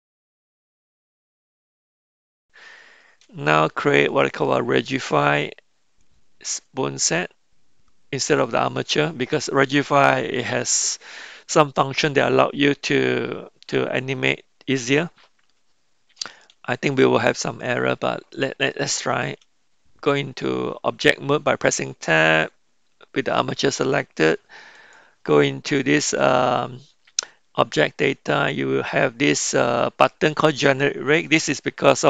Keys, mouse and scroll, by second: 0.5 click, 1.2 r, 1.8 Tab, 2.0 Tab, 2.1 middle click, 2.7 KP_1, 19.4 Tab, 24.8 click.